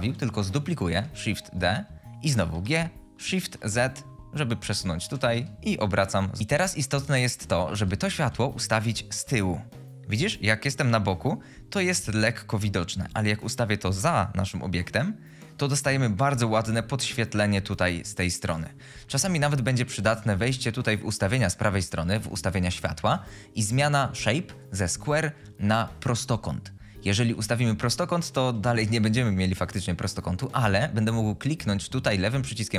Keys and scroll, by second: 1.0 shift+d, 2.5-3.3 typing, 5.0-5.8 typing, 7.7-8.3 typing.